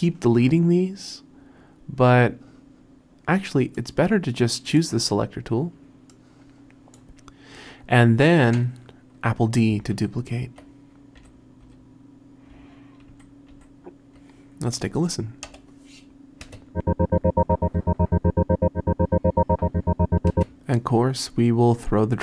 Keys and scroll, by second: 10.0 super+d, 11.2 r, 11.7 r, 13.1 super+d, 15.5 Return, 16.5 space, 20.3 space.